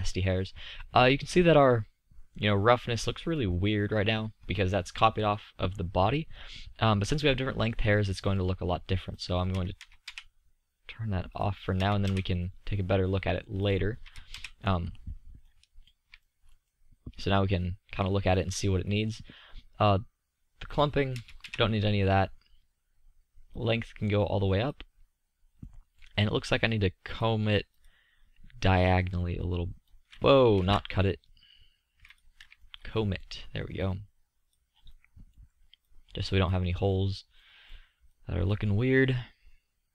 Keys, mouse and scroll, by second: 5.0-8.8 middle drag, 10.8 middle click, 12.9 middle click, 15.1-19.2 middle drag, 20.4-21.8 drag, 30.7 ctrl+z.